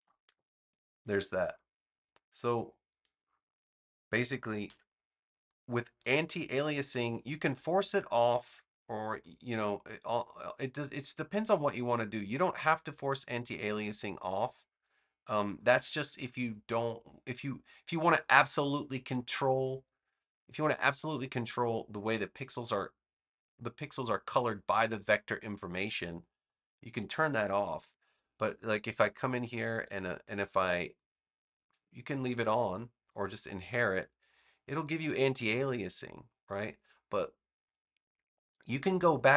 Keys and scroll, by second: 4.6 v.